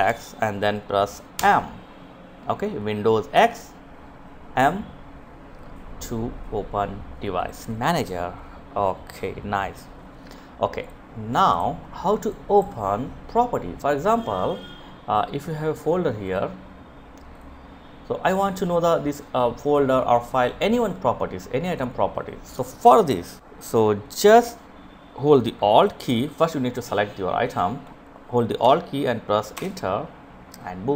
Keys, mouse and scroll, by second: 0.0 m, 9.4 right click, 10.1 click, 12.6 right click, 15.9 click, 23.0 right click, 23.4 click, 28.1 Return.